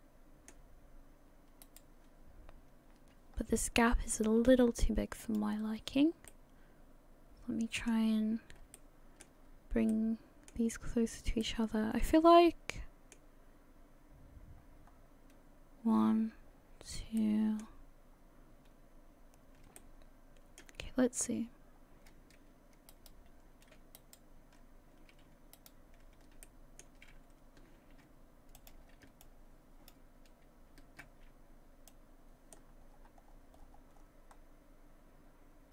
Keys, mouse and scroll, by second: 1.6 right click, 3.3-3.8 scroll up 1, 3.8 scroll down 1.